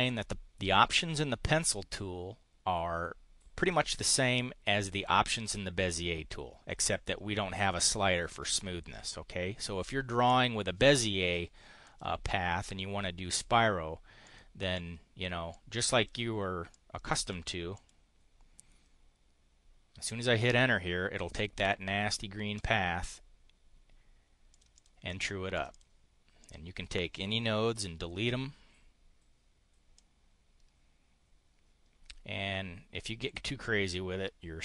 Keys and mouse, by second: 3.6 click, 11.8 click, 14.2 click, 14.7 click, 15.5 click, 16.6 click, 17.6 click, 22.5 click, 24.5 click, 25.4 click, 26.4 click, 27.6 Delete, 30.0-34.6 drag.